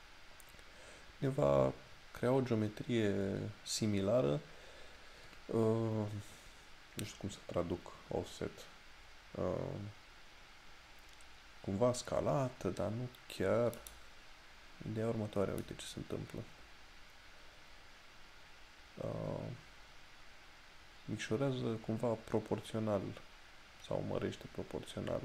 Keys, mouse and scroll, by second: 13.9 click.